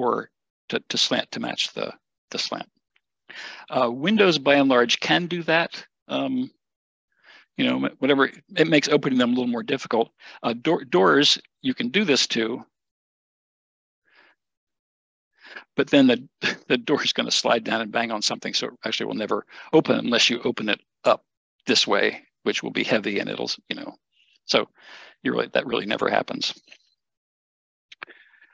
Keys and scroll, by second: 4.1 Escape.